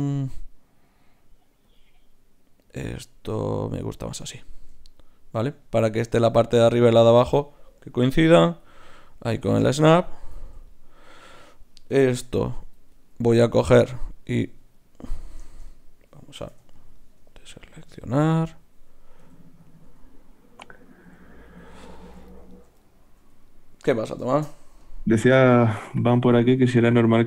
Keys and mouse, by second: 3.0-5.7 middle drag, 7.0 z, 8.0 g, 12.2 ctrl+r, 14.5 z, 16.5 b, 17.8 z, 19.2 g, 19.8 s, 21.0 g, 21.7-25.3 middle drag, 22.5-24.2 drag, 23.2 z, 24.8 KP_Decimal, 26.6 b.